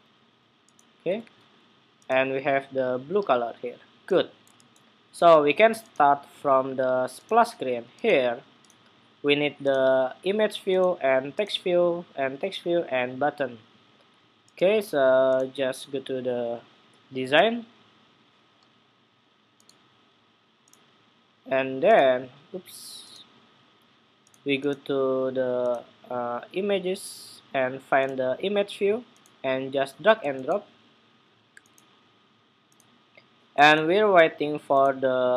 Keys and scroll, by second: 0.9 super+w.